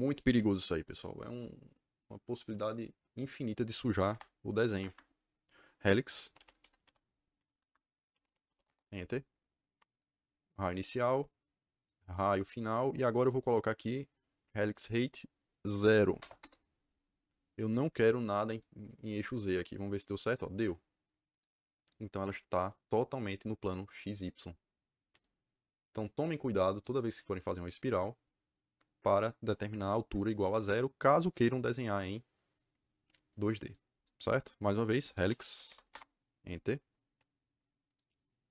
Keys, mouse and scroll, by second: 2.4 click, 4.7 Escape, 5.9-9.0 typing, 7.3 Escape, 7.5 Escape, 9.9 click, 12.1 click, 16.1 KP_0, 16.3 KP_Enter, 21.2 click, 26.6 click, 34.8-36.1 typing, 37.8 click.